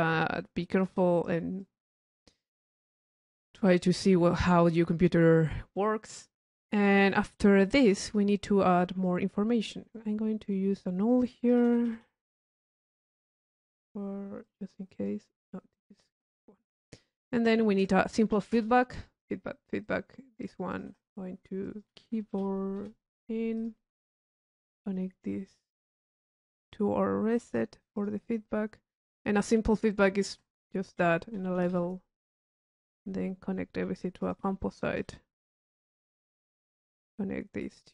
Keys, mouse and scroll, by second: 4.3 click, 5.5 click, 6.6 middle click, 7.0 click, 7.6 right click, 7.9 middle click, 7.9 click, 8.1 middle click, 8.1 click, 8.3 middle click, 8.3 click, 9.8 middle click, 9.8 middle click, 10.7 right click, 11.2 click, 11.2 middle click, 11.8 u, 12.4 click, 12.7 click, 13.5 click, 14.6 click, 15.1 click, 15.6-17.3 drag, 17.5 click, 19.4 click, 20.0 click, 21.8 click, 23.7 click, 26.0-27.9 drag, 29.3 click, 30.0-31.0 drag, 32.3 click, 33.0 click, 33.9 right click, 34.4 click, 34.6 c, 36.4 click.